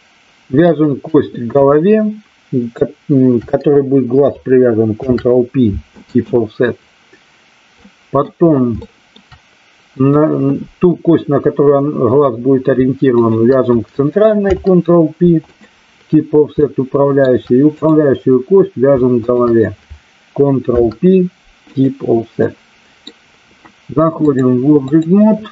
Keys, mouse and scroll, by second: 5.0 ctrl+p, 7.8 middle click, 8.8 shift+middle click, 10.0 click, 13.1 shift+click, 16.6 shift+middle click, 17.8 click, 19.2 shift+click, 22.5 middle click, 24.1-25.0 drag.